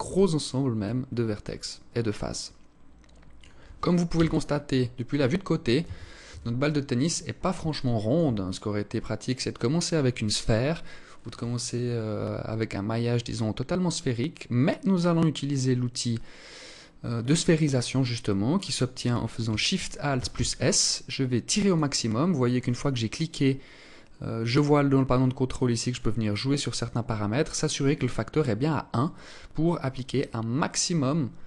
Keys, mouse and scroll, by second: 1.0 alt+click, 3.5 KP_1, 5.2 a, 7.2 alt+shift+click, 7.2 a, 7.9-8.4 scroll up 1, 8.4 scroll down 1, 8.6 scroll down 1, 19.5 alt+shift+s, 25.1 click.